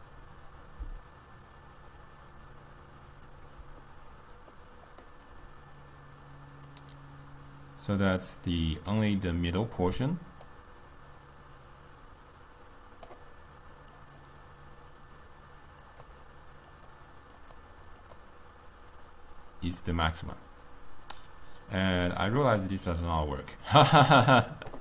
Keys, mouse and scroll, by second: 8.1-20.4 drag, 20.4-24.8 middle drag.